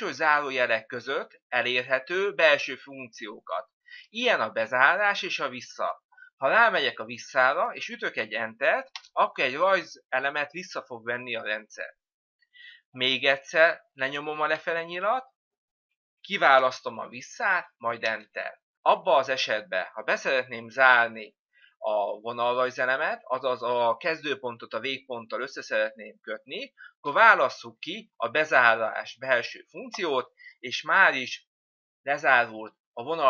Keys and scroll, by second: 1.0 Down, 4.6 Down, 8.9 Return, 9.9 Return, 15.2 Down, 18.0 Return, 27.0 Down, 29.9 Return.